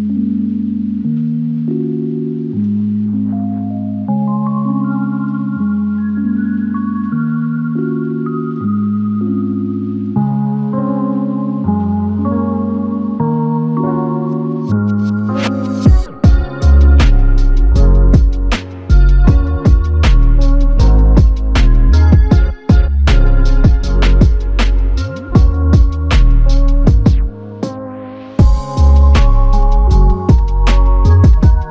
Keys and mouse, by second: 0.8 shift+click, 5.3 alt+click, 9.1 alt+shift+click, 12.8 alt+click, 14.1 alt+shift+click, 18.2 f, 20.4 typing, 23.7 ctrl+click.